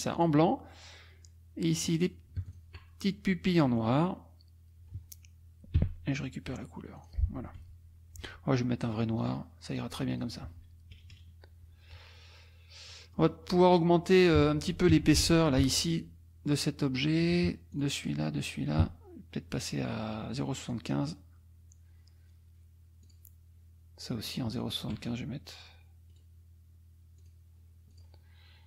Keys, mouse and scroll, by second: 0.2 click, 1.8 click, 2.5 shift+click, 5.8 d, 7.0 click, 7.6 F1, 9.2 click, 10.1 click, 10.4 F1, 10.9 KP_Subtract, 13.0 middle click, 13.5 middle click, 14.1 middle click, 15.0 F2, 15.6 click, 17.8 shift+click, 18.5 shift+click, 19.9 right click, 20.6 click, 23.0 click, 24.2 shift+click, 24.7 shift+click, 26.1 click, 27.2 click, 27.9 click.